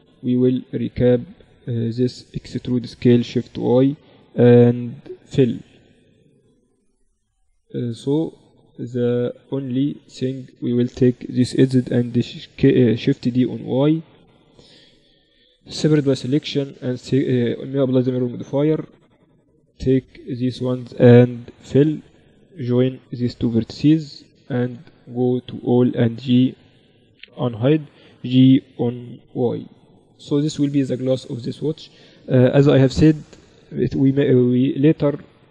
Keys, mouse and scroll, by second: 0.8 z, 2.0 e, 4.7 f, 5.1-9.6 middle drag, 9.6-12.0 right drag, 12.0 shift+d, 14.9 p, 15.6 Tab, 16.1 right click, 16.6-19.1 drag, 17.0-18.0 right drag, 17.3 Tab, 18.5 right click, 19.5-20.6 right drag, 20.6-21.9 middle drag, 20.9 f, 21.9-24.2 right drag, 23.3 j, 24.2 a, 24.5 Tab, 25.5 h, 26.9 alt+h, 27.3-29.1 drag, 28.3 g, 30.8-32.9 middle drag.